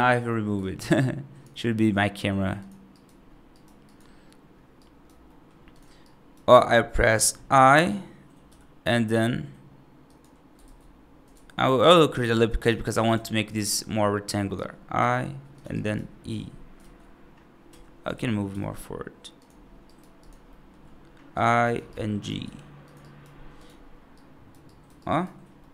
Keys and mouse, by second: 2.4 click, 2.8 right click, 3.4 right click, 4.7 right click, 5.1 middle click, 5.9 right click, 6.7 middle click, 8.3 i, 10.5 ctrl+z, 11.2 ctrl+r, 13.3 3, 13.6 click, 14.2 right click, 14.8 i, 15.6 right click, 16.1 e, 18.0 ctrl+z, 18.4 g, 19.7 right click, 20.3 middle click, 21.2 i, 21.8 right click, 22.3 g, 22.9 right click, 24.1 right click, 24.5 right click, 24.8 right click, 24.9 right click, 25.4 middle click.